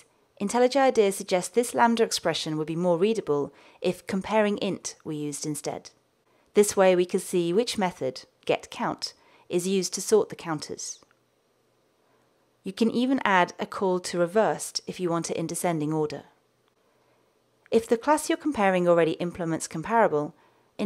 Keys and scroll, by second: 13.9 Return.